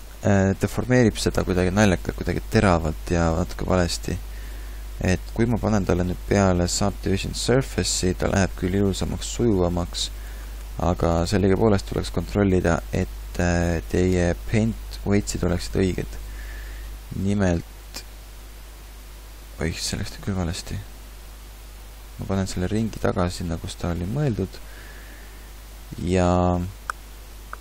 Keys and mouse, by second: 12.6-15.1 middle drag, 17.6 alt+r, 18.3 alt+g, 20.6 ctrl+z, 21.0 ctrl+z, 21.3 ctrl+z, 22.7 ctrl+z, 23.3 ctrl+z, 23.7 ctrl+z.